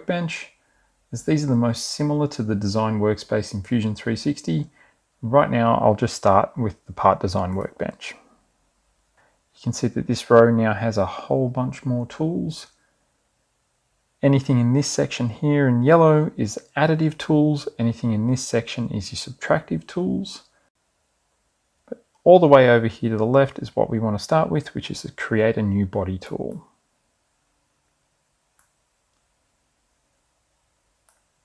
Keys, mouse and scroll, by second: 10.5 click, 27.7 click, 30.0-31.4 drag.